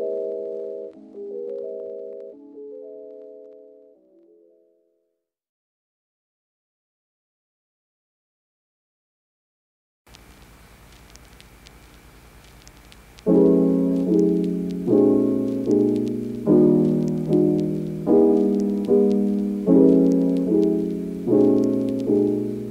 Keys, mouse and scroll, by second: 0.9 g, 1.0 y, 2.2 ctrl+r, 2.9 click, 3.2 g, 3.4 y, 4.2 ctrl+r, 5.1 g, 5.3 y, 5.3 click, 5.9 ctrl+r, 6.0 ctrl+r, 6.6 click, 6.8 ctrl+r, 7.5 g, 7.7 y, 7.8 click, 8.7-9.0 ctrl+r, 9.3 ctrl+e, 9.6 ctrl+r, 10.7 click, 11.1 g, 11.1 y, 11.6 ctrl+r, 12.5 g, 13.1 g, 13.1 y, 13.2 g, 13.7 click, 14.8-15.1 ctrl+r, 15.0 ctrl+scroll up 1, 15.9 click, 16.2 ctrl+r, 16.5 click, 16.8 g, 17.0 y, 17.9-18.8 ctrl+r, 19.1 click, 19.3 click, 19.5 g, 19.6 y, 21.3-22.7 typing, 22.1 click.